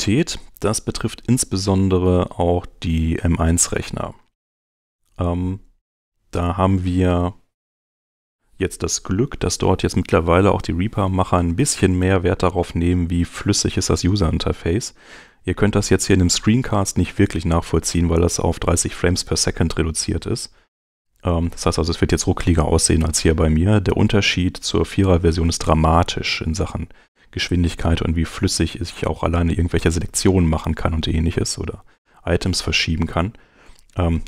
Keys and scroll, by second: 0.5 super+Tab, 33.1 Home.